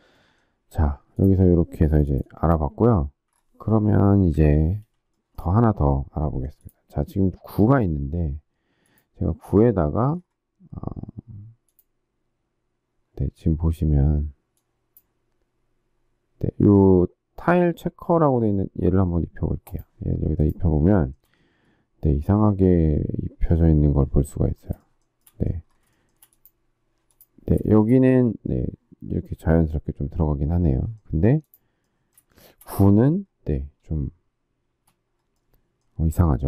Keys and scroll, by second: 4.3 Delete, 34.6 space.